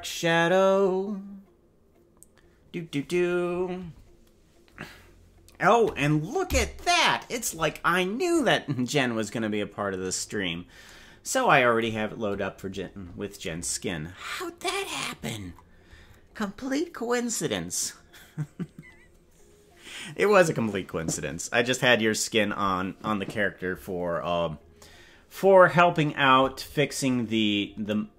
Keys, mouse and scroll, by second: 6.4 KP_Decimal, 10.4 scroll down 4, 27.2 scroll up 4.